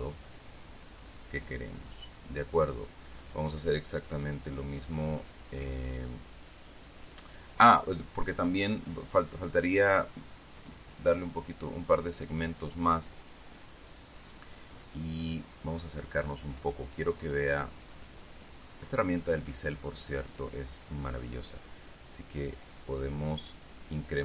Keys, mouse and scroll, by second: 2.4 click, 5.5-8.5 middle drag, 11.2 click, 11.8 click, 15.2 click, 16.3-17.0 scroll up 2, 17.0 scroll up 1, 17.3-19.4 middle drag, 22.4-24.2 drag.